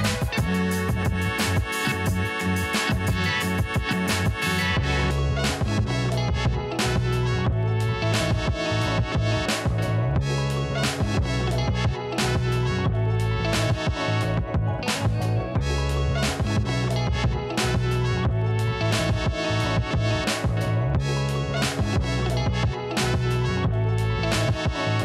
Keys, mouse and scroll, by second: 0.3 click, 1.7 Left, 2.8 Up, 3.6-4.1 scroll up 1, 4.1 right click, 4.6-6.2 drag, 6.2 Down, 7.7 click, 8.7-9.6 scroll up 1, 9.6 click, 11.5-12.3 typing, 13.1 ctrl+t, 13.9-17.6 alt+shift+drag, 17.8 click, 18.2 ctrl+t, 19.2-24.6 alt+drag.